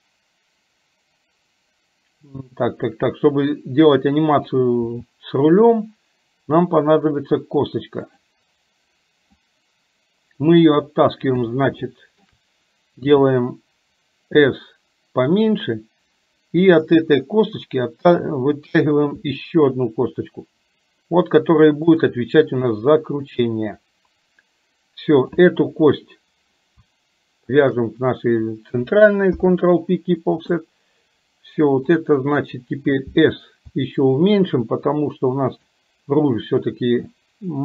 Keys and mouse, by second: 9.4-10.8 drag, 11.9 shift+middle click, 16.8 click, 22.7 click, 25.2 click, 27.6 shift+click, 29.4 ctrl+p, 32.1 click.